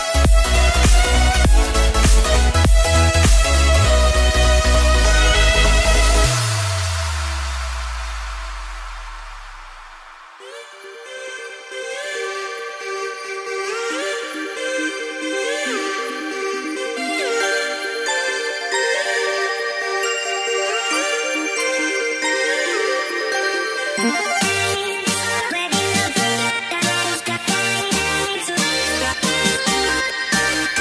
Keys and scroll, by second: 4.3 ctrl+=, 4.4 ctrl+=, 6.0 ctrl+c, 6.2 ctrl+f, 20.0 ctrl+g, 20.5 ctrl+g, 20.6 ctrl+-, 20.7 ctrl+-, 24.2 ctrl+=.